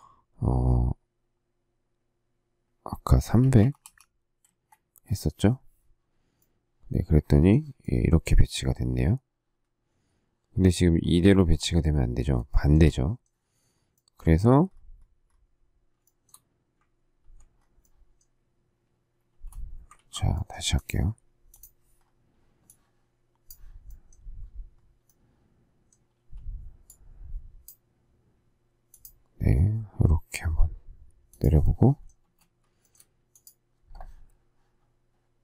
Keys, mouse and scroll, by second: 3.2-4.3 typing, 4.4 Return, 12.5 shift+middle click, 16.0 shift+middle click, 19.3 space, 20.5 ctrl+z, 26.2 q, 32.2 space, 32.8 shift+middle click.